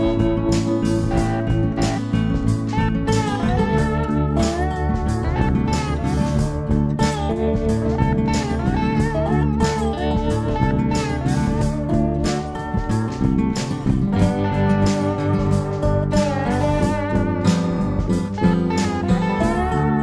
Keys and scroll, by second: 3.1 b, 4.5 Delete, 11.3 Delete, 12.7 b.